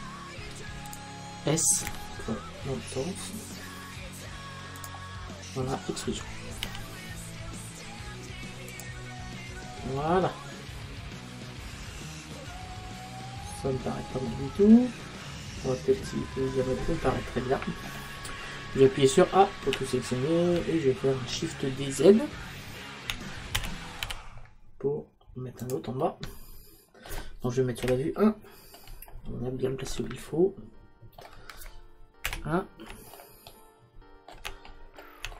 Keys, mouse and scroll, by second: 1.0 click, 2.9 s, 4.9 click, 6.7 e, 8.9 click, 19.4 a, 19.7 a, 23.6 shift+d, 25.8 click, 27.5 middle click, 27.9 KP_1, 32.3 KP_1.